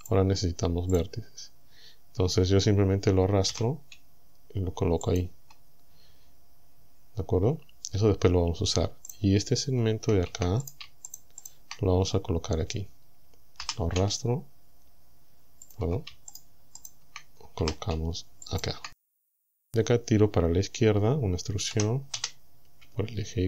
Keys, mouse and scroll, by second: 0.0 click, 1.0 click, 3.5 g, 5.1 ctrl+click, 9.1 right click, 10.7 shift+right click, 11.1 shift+right click, 11.5 shift+right click, 13.7 g, 15.7 ctrl+click, 16.3 shift+right click, 16.8 shift+right click, 17.6 g, 18.5 ctrl+click, 19.5 right click, 21.7 e, 22.2 x.